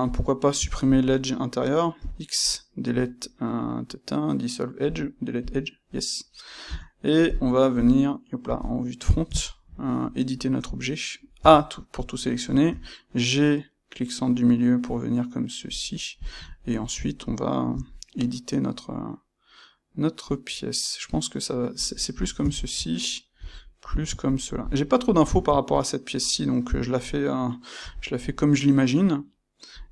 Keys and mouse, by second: 0.0 click, 0.5 Tab, 0.8 click, 1.9 x, 5.9-15.7 middle drag, 6.6 Tab, 7.7 KP_2, 11.3 a, 16.1 click, 16.4 ctrl+right click, 17.7 g, 22.1 click, 22.5 shift+click, 23.4 g, 24.5 click, 27.7 g, 29.8 click.